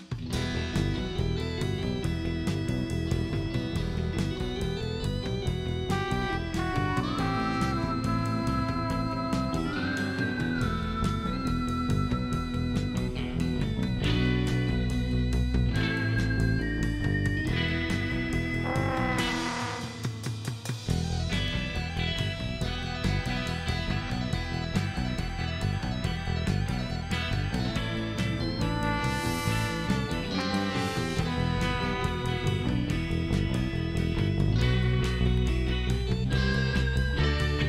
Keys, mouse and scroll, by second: 0.3 shift+middle drag, 1.6 shift+middle click, 2.8 shift+middle drag, 3.7 shift+middle drag, 5.8 shift+right click, 9.1 shift+right click, 10.5 shift+right click, 12.7 shift+right click, 14.3 click, 15.8 click, 16.6 scroll down 1, 17.1 shift+right click, 18.2 ctrl+shift+right click, 19.1 ctrl+shift+right click, 20.0-20.6 shift+middle drag, 20.7 shift+right click, 22.6 shift+right click, 23.3 shift+middle click, 25.3 shift+right click, 27.0 shift+middle click, 27.7 shift+right click, 31.1 shift+right click.